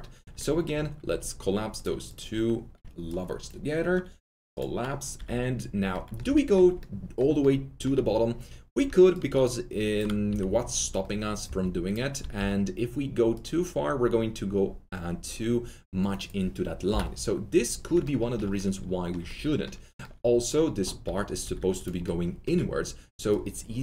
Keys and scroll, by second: 1.0 alt+1, 10.2 shift+r, 12.3 w, 18.0 Delete, 21.0 alt+2.